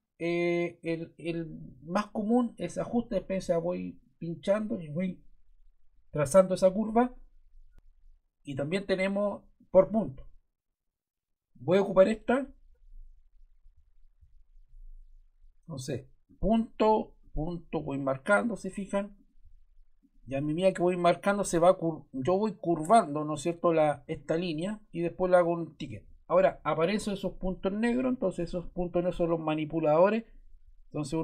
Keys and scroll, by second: 27.6 Escape.